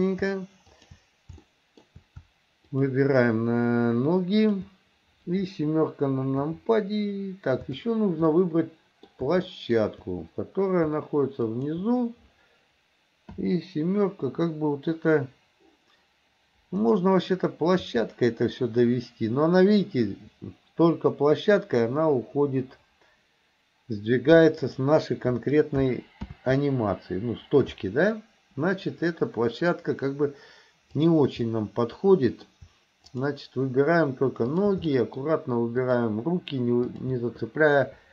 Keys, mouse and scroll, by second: 0.7 shift+click, 1.5-1.9 shift+middle drag, 2.8 shift+click, 4.4 shift+click, 6.4 KP_7, 8.4 middle click, 9.5 shift+middle click, 11.5 shift+click, 13.4 KP_7, 16.8 click, 17.9 r, 26.4 ctrl+z, 31.0 click, 31.4-32.5 middle drag, 33.1 shift+click, 34.5 shift+click, 34.9-35.3 shift+middle drag, 35.8 shift+click, 36.9 shift+click.